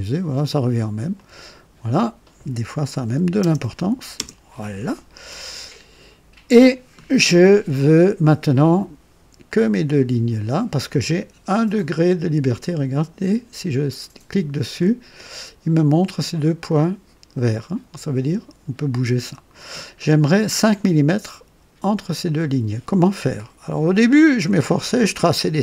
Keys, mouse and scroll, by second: 1.1 click, 3.0 KP_3, 3.4 KP_0, 4.1 Return, 5.5-6.7 drag, 6.9-7.3 scroll up 1, 9.4-11.1 drag, 12.0 click, 13.6 click, 13.9 typing, 17.9-19.7 drag.